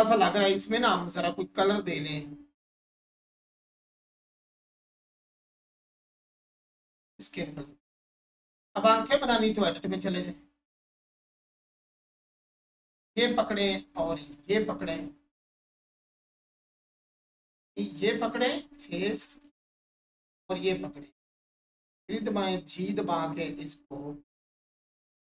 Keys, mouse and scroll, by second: 0.4 click, 9.0 Tab, 9.6-10.3 scroll up 1, 11.7 alt+shift+click, 14.3 ctrl+click, 17.9 click, 19.7 shift+click, 21.2 3.